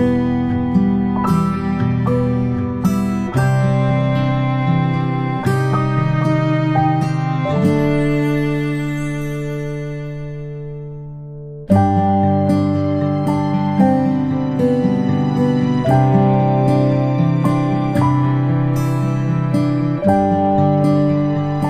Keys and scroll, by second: 14.4 space, 14.7-20.6 space.